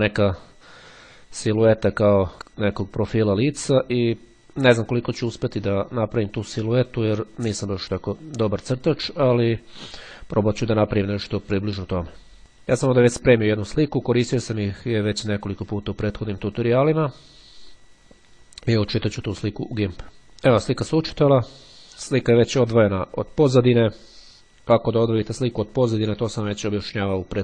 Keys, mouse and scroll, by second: 12.6 click, 13.7 right click, 16.3-17.5 drag.